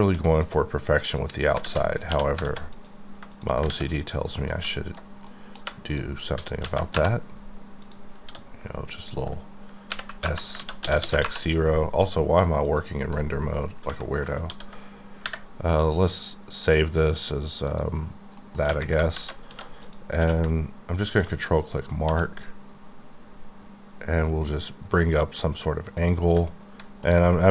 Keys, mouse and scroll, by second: 0.4 click, 1.0 click, 1.6 alt+z, 2.1 2, 2.4 alt+z, 2.7 click, 3.3 shift+click, 3.7 ctrl+x, 4.1-4.5 scroll down 3, 4.5 middle click, 5.4 KP_1, 5.6 3, 5.9 click, 6.3 s, 6.6 z, 6.9 KP_Enter, 7.9 click, 9.9 y, 10.0 KP_0, 10.2 KP_Enter, 10.6 ctrl+z, 11.0 s, 11.1 KP_0, 11.2 KP_Enter, 12.6 click, 13.4 middle click, 14.4 ctrl+s, 16.6 click, 17.7 click, 18.4 middle click, 18.6 scroll, 19.1 alt+z, 19.6 2, 19.8 click, 20.2 q, 21.1 ctrl+click, 22.0 1, 22.7-23.1 scroll up 2, 24.7 scroll down 5, 26.4 middle click.